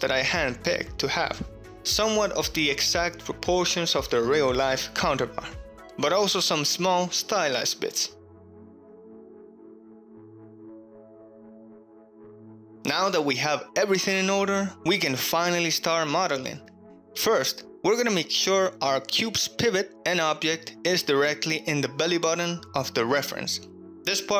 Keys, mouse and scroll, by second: 0.1 ctrl+middle click, 2.2 click, 2.7 click, 4.2-6.0 drag, 7.2-8.5 drag, 8.9 shift+middle click, 11.5 middle click, 11.8 middle click, 11.9 KP_1, 12.2 KP_3, 12.6 middle click, 13.7-14.2 middle drag, 18.3 KP_1, 19.3 ctrl+shift+middle click, 19.9-20.7 shift+middle drag, 21.3 g, 21.4 z, 22.7 click, 22.9-23.3 shift+middle drag, 23.4 ctrl+middle drag, 23.9 alt+z, 24.3 shift+middle click.